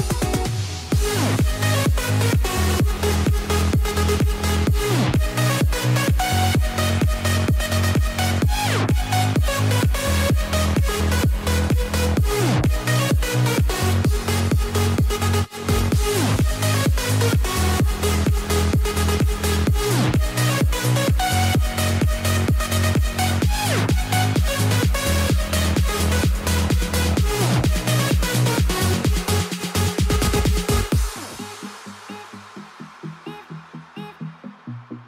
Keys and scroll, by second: 8.5 ctrl+t, 13.1 alt+Tab, 17.1 space.